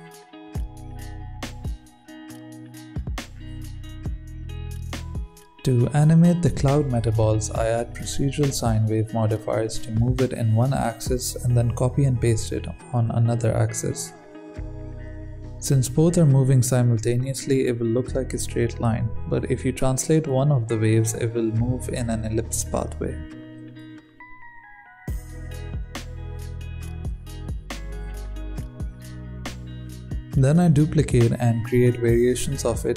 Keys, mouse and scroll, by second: 0.8 KP_1, 1.1 click, 1.4 click, 1.7 BackSpace, 2.2 click, 3.0 click, 3.2-3.5 scroll, 4.2-4.7 scroll up 6, 4.7-6.2 scroll down 1, 6.2 click, 6.6 i, 7.0-9.1 drag, 9.4-13.2 drag, 13.2 KP_1, 13.3 scroll down 2, 13.5 scroll up 1, 13.6 shift+middle click, 13.9-16.2 drag, 16.9-19.2 drag, 20.2-21.8 drag, 22.5-25.6 drag, 26.4 s, 26.7 s, 28.2-28.5 drag, 28.5 shift+d, 30.3 g.